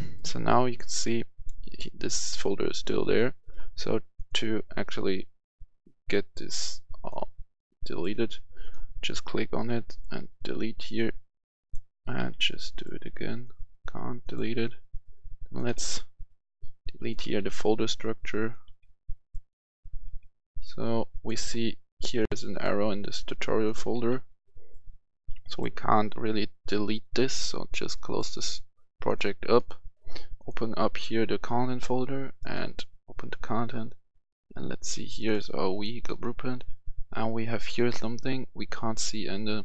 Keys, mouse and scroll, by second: 8.4 click, 9.1 Delete, 9.9 click, 12.1 Delete, 12.7 click, 14.4 Delete, 15.7 Delete, 16.1 click, 17.2 Delete, 17.7 click, 18.6 Delete, 19.1 click, 20.0 Delete, 20.4 click, 23.9 Delete, 24.4 click, 29.5 right click, 30.3-35.7 drag.